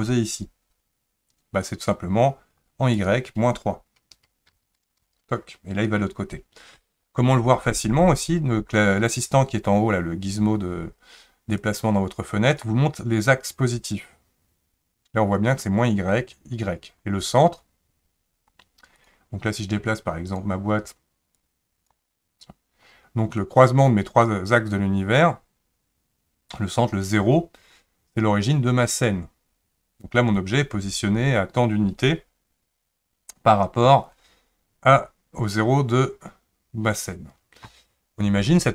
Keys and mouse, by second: 2.9-5.0 drag, 11.6-12.6 drag, 19.0 click, 20.3 click, 21.4 click.